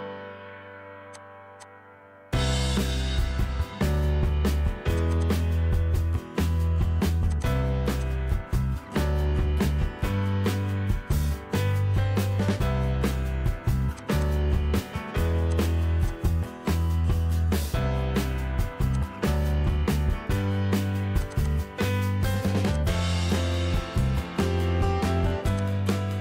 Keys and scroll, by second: 2.2-4.0 typing, 6.0 ctrl+g, 8.9 ctrl+c, 9.3 Escape, 10.8 p, 11.9-13.3 typing, 15.3 ctrl+g, 16.1-16.8 typing, 17.3 Escape, 18.8-22.0 typing, 22.2 ctrl+g.